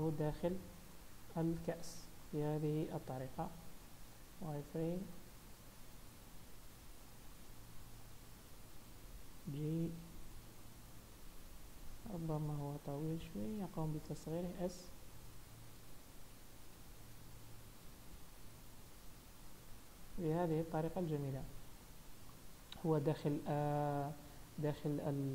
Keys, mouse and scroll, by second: 1.1 KP_1, 2.0 scroll down 1, 2.3 shift+middle click, 2.8 z, 3.7 shift+middle click, 4.5 r, 5.6 g, 7.4 scroll up 2, 7.7 shift+middle click, 8.3 scroll up 1, 9.3 g, 10.7 scroll down 1, 11.0 shift+middle click, 11.9-12.3 scroll down 2, 12.9 s, 14.9 scroll up 2, 15.2 shift+middle click, 16.0 g, 19.7-20.1 scroll down 2, 20.1 z, 21.1 middle click, 22.4 scroll up 1, 23.2 KP_7, 24.1-25.3 scroll up 2.